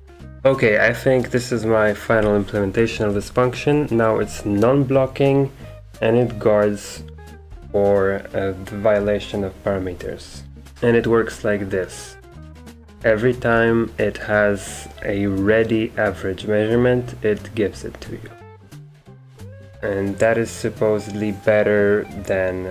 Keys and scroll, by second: 2.2-3.5 typing, 10.1-11.2 typing.